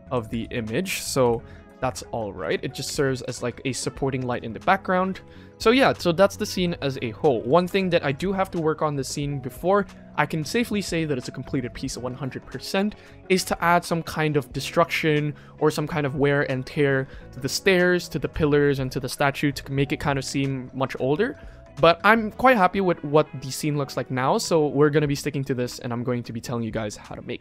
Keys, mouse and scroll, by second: 1.2 middle click, 2.1 middle drag, 2.4-2.9 scroll down 3, 2.9 shift+middle drag, 3.5 ctrl+s, 4.3-4.8 scroll down 3, 4.8 middle drag, 5.1 KP_1, 5.5 scroll up 3, 5.9 shift+middle drag, 6.2-6.5 middle drag, 6.8 shift+middle drag, 7.4 ctrl+s, 7.6-8.0 ctrl+middle drag, 8.1-8.4 ctrl+shift+middle drag, 8.1 shift+scroll down 1, 17.4 shift+middle drag, 18.3 shift+middle drag.